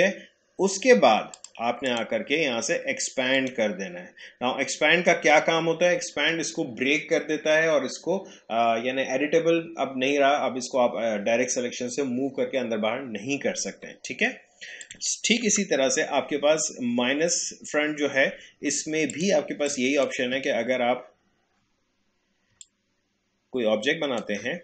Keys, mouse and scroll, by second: 1.4 click, 14.8 click, 15.4 Delete, 19.1-24.6 drag.